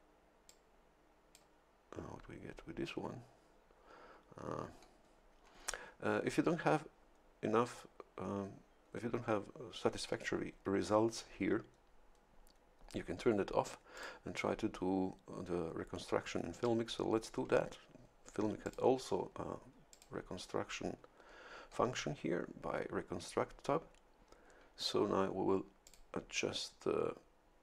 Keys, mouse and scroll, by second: 0.5-1.6 drag, 13.9 click, 18.6 click, 20.1 click, 25.8 click.